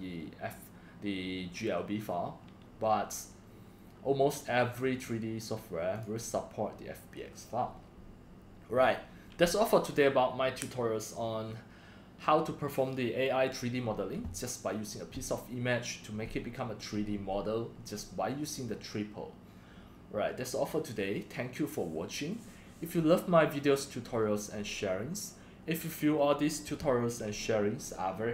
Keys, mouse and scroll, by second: 6.0 click.